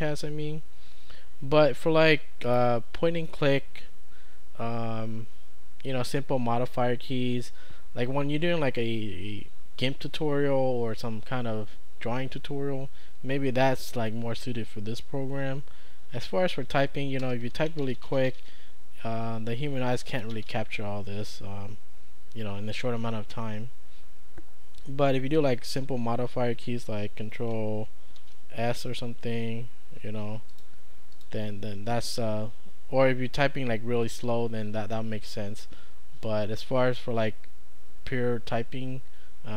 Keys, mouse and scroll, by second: 17.2 Return, 17.4-18.6 typing, 19.8-21.1 typing, 28.2 ctrl+s, 30.5 click.